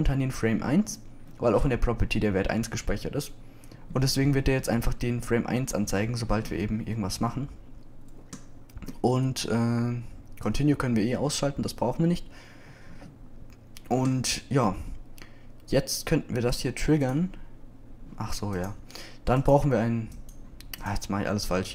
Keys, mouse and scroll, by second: 7.0-8.5 middle drag.